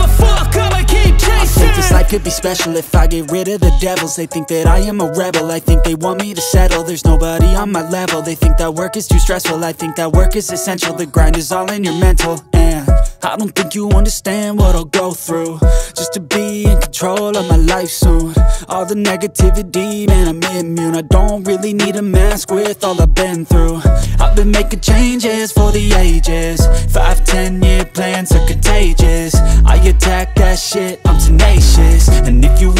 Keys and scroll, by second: 1.3 s, 3.3 g, 3.4 z, 5.1 ctrl+r, 5.8 s, 6.2 Escape, 6.6 s, 8.8 s, 13.9 g, 14.0 z, 17.0 g, 17.1 y, 20.1 shift+d, 20.4 y, 22.6 5, 23.3 g, 23.5 z, 25.7 ctrl+r, 26.1 Escape, 26.6 ctrl+r, 29.0 ctrl+r.